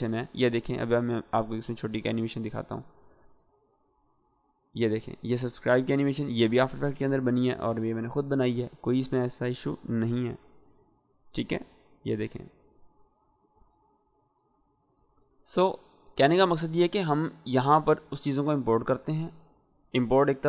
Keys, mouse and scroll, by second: 9.7 -, 12.0-16.3 drag.